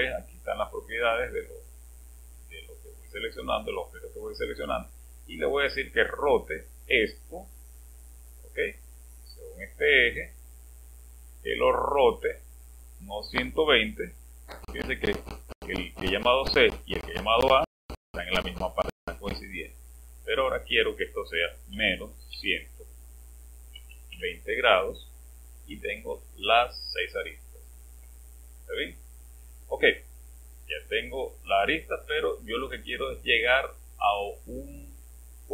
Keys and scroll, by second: 21.7-24.1 typing.